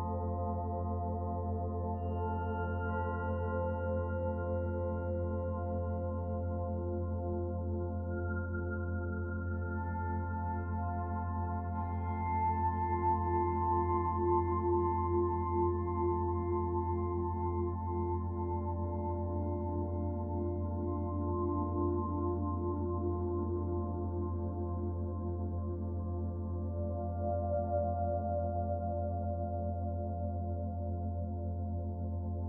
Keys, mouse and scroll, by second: 2.1 click, 2.9 click, 4.5 middle click, 5.1 click, 7.5 click, 10.0 middle click, 12.5 middle click, 13.7 click, 14.8 click, 17.1 middle click, 17.8 middle click, 18.4 click, 19.9 shift+d, 21.2 click, 23.4 middle click, 25.0 Tab, 25.6 right click, 27.7 click, 30.5 click.